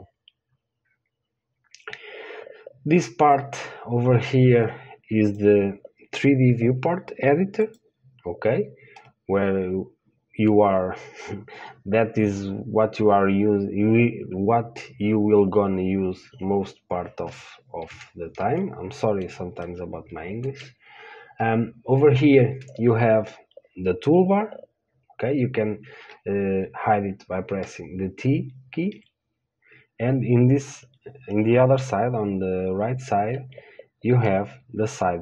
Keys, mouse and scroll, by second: 8.0-9.9 drag, 9.3 middle click, 9.9-27.9 middle drag, 27.9 t, 29.2 t, 34.5 n.